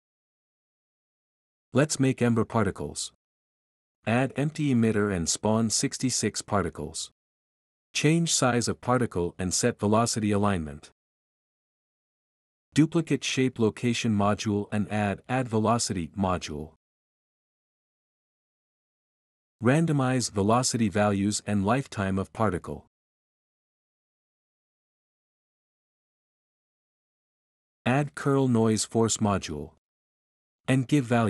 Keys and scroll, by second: 2.1 Delete, 6.5 6, 6.6 6, 8.6-11.0 typing, 13.5 ctrl+c, 14.0 ctrl+v, 16.1-17.0 typing, 20.5-23.4 typing, 25.1-25.7 typing, 28.4-29.8 typing.